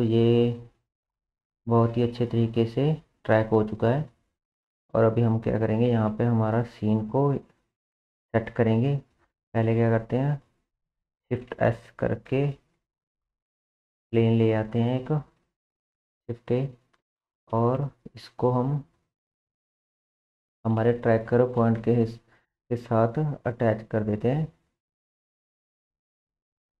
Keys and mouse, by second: 6.7-11.1 drag, 11.5 shift+s, 13.6 shift+a, 17.9 Tab, 18.9 click, 19.2-21.4 drag, 22.2 g, 25.3-26.8 drag.